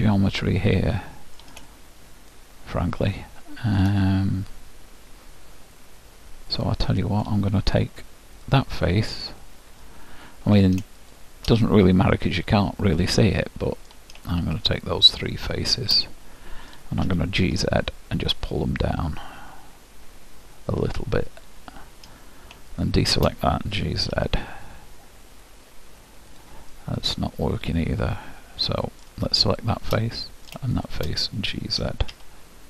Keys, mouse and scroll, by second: 1.7-3.6 middle drag, 4.0-6.0 middle drag, 8.6-12.9 drag, 9.8-13.5 middle drag, 14.5-16.1 drag, 16.0 middle click, 16.2-17.8 middle drag, 17.2 g, 22.8-24.6 drag, 23.8 g, 26.7-28.5 middle drag, 29.6-32.6 drag, 30.0 middle click, 31.9 g.